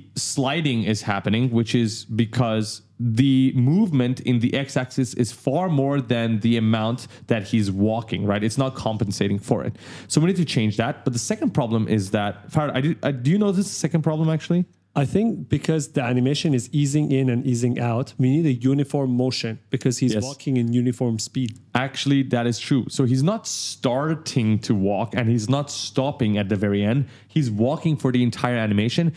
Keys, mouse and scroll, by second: 1.2 space, 10.0 click, 13.2 click.